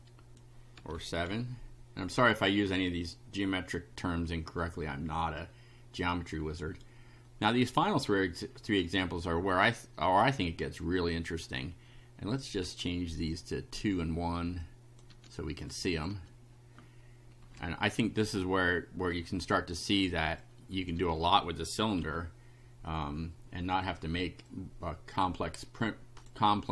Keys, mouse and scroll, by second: 0.7 7, 1.3 F5, 4.7-6.9 right drag, 8.0 right click, 11.5-12.5 drag, 12.6 2, 13.3 click, 13.7 1, 14.6 click, 15.1 2, 15.7 click, 16.1 1, 17.4 Delete, 19.1 click, 19.7 2, 20.4 click, 21.0 1, 22.0 F5, 24.5-26.4 drag.